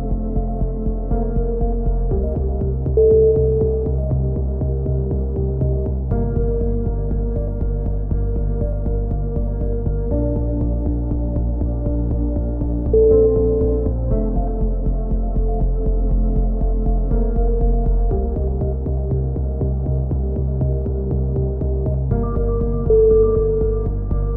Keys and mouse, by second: 0.1 click, 0.9 a, 1.1 right click, 1.5 KP_3, 1.9-4.6 drag, 4.9 click, 9.0-11.9 typing, 10.2 click, 10.8-11.9 right drag, 13.6 KP_7, 14.1 click, 15.1 click, 15.1 right click, 15.6 click, 17.0 s, 18.3 a, 18.6 KP_3, 19.4 KP_7, 19.6 click, 20.9 right click, 21.8 e, 22.1-23.2 drag, 22.9 KP_3, 23.3 click.